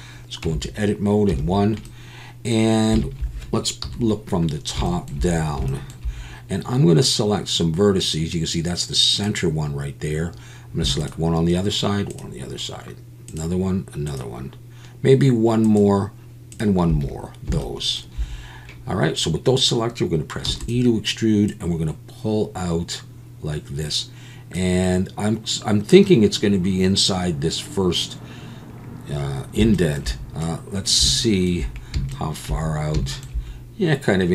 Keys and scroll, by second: 0.4 Tab, 1.3 1, 3.8 KP_7, 20.5 e.